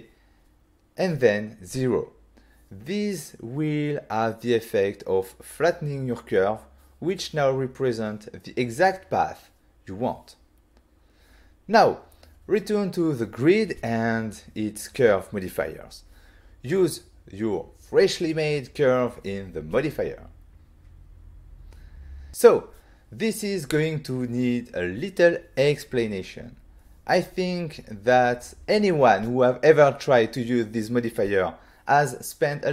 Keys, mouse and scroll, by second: 0.8 0, 2.6 Return, 3.5 middle click, 6.7 middle click, 7.5 middle click, 8.0 middle click, 8.4 Tab, 9.3 z, 10.1 middle click, 14.0 middle click, 14.5 z, 14.7 middle click, 15.0 middle click, 15.1 ctrl+middle click, 15.8 t, 16.6 click, 17.8 scroll down 1, 20.7 click, 22.4 click, 22.7 click, 24.1 shift+middle click.